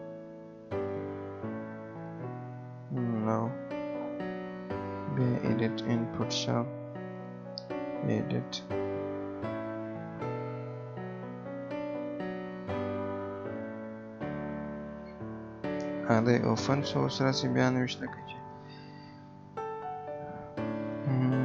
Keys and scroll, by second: 18.6 Pause, 18.9 BackSpace.